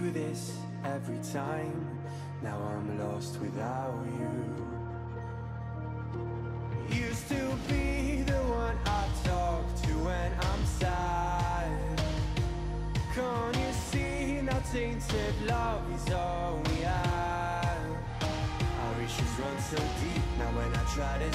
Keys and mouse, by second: 3.1 click, 10.6 click, 13.7 click, 16.7 click, 18.6 click, 19.7 click.